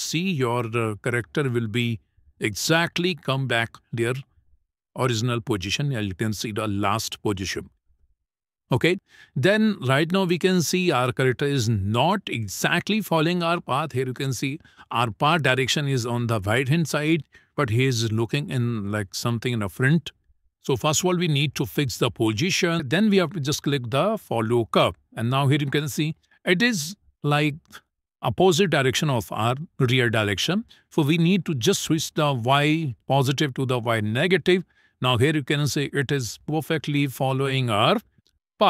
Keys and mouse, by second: 1.1 click, 2.0 click, 21.8 click, 24.3 click, 33.8 click, 35.5 shift+middle click, 36.2-37.5 middle drag.